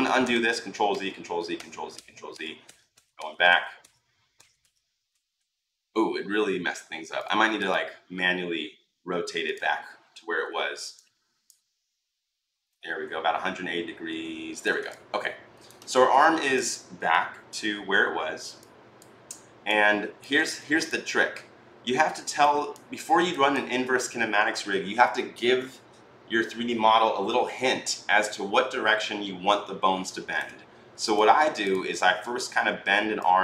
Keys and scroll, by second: 0.1 ctrl+z, 0.7 ctrl+z, 1.4 ctrl+z, 1.7 ctrl+z, 2.1 ctrl+z, 2.4 ctrl+z, 10.2 r.